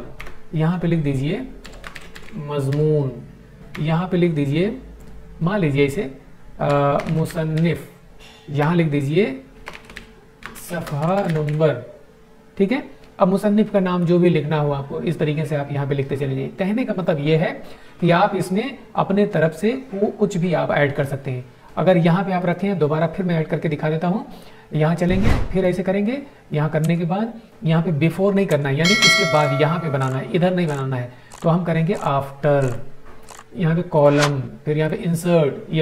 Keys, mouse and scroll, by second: 1.2-2.7 typing, 3.6 Tab, 6.4-7.7 typing, 8.5 Tab, 9.3-11.7 typing, 13.9 click, 22.3 right click, 25.6 click, 32.5 click.